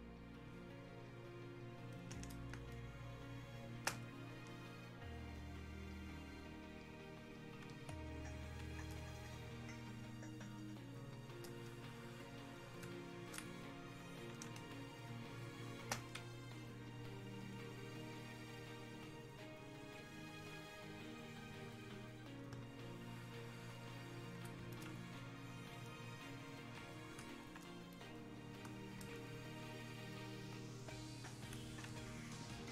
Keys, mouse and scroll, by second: 1.9 click, 2.6 space, 3.2 click, 3.4 space, 4.4-14.6 drag, 14.6 space, 16.7-29.3 drag, 29.3-32.7 alt+drag.